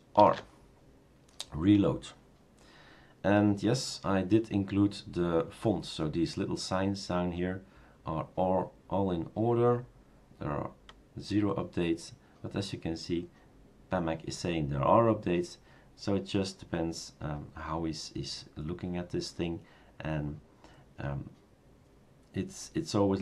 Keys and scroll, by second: 0.4 shift+super+r.